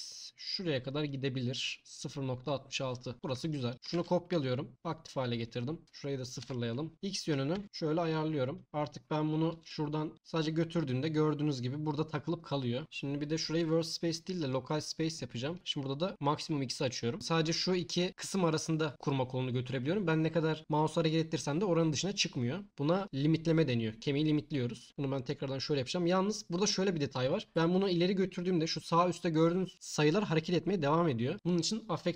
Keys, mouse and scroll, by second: 2.2 click, 3.1 BackSpace, 3.7 ctrl+click, 5.8-7.4 drag, 9.6 t, 10.1 t, 13.4-14.5 drag, 16.7 click, 25.2-32.1 drag.